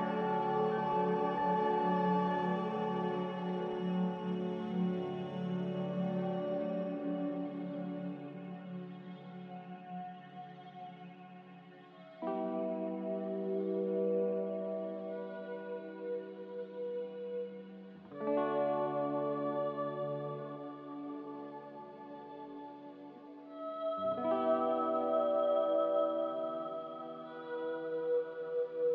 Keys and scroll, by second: 0.8 b, 1.8 Delete, 2.3 n, 11.9 b, 16.4 z, 17.0 Delete, 19.4 b, 27.4 z.